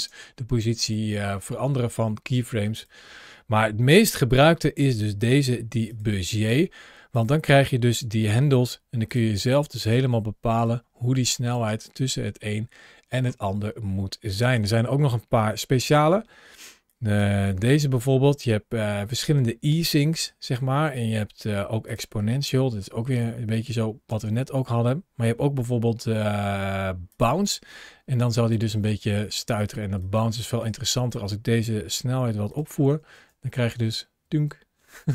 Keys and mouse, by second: 0.8-2.7 drag, 3.7 t, 7.9 g, 8.9 click, 9.8 g, 10.4 click, 11.1 drag, 11.5 space, 14.2 space, 14.5 click, 15.3 t, 15.9 t, 16.8 drag, 17.3 t, 22.6 space, 23.9 space, 25.1 t, 28.0 click, 28.5 space, 29.9 click, 30.8 click, 31.8 g, 32.3 click, 33.0 space.